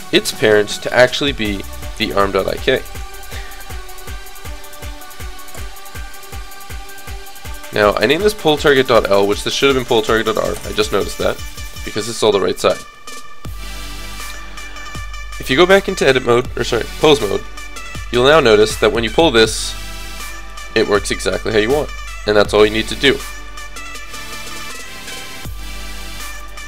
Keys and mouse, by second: 2.9-4.0 right drag, 4.0 middle click, 6.8-8.5 middle drag, 9.6-11.8 drag, 16.3-18.2 drag, 16.3-17.3 right drag, 18.9-20.2 drag, 18.9 right click, 19.8 g, 21.1 g, 22.6-26.6 drag.